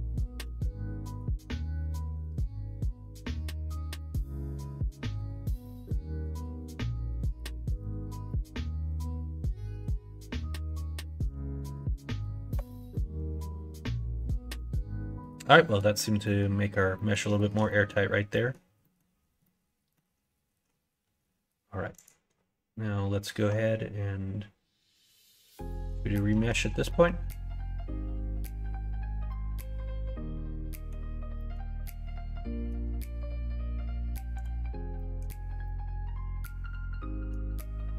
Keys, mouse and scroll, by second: 0.5 middle click, 1.1 middle click, 1.9 middle click, 2.8 middle click, 6.6 click, 7.3 click, 8.8-13.5 drag, 14.2 middle click, 15.5 middle click, 16.2 middle click, 16.9 middle click, 17.3 shift+middle click, 17.7 middle click, 18.3 middle click, 18.8 middle click, 19.4 middle click, 22.0-25.3 drag, 25.6 middle click, 26.4 Tab, 26.9-28.4 middle drag, 29.3-30.9 middle drag, 31.3 middle click, 31.8 middle click, 34.4 click, 34.9 middle click, 35.6-37.3 middle drag, 37.7-37.9 middle drag.